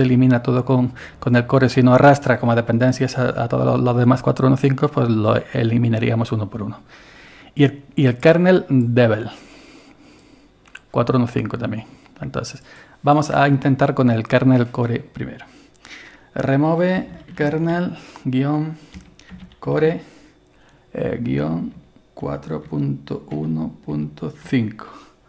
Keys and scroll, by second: 16.8-20.4 typing, 21.5-24.4 typing.